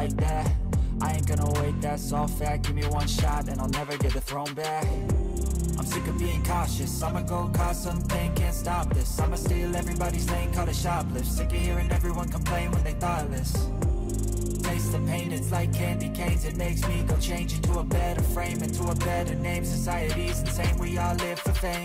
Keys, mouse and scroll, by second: 0.4-1.5 typing, 2.9-4.2 typing, 5.8 ctrl+a, 13.1 double click, 18.7 ctrl+z.